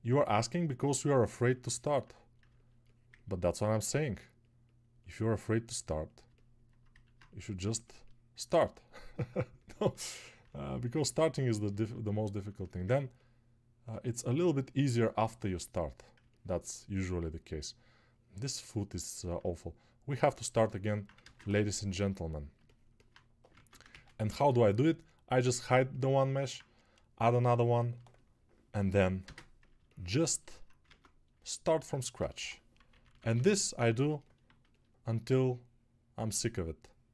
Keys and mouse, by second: 29.3 ctrl+space, 30.8 ctrl+Tab, 32.4 g, 32.9 ].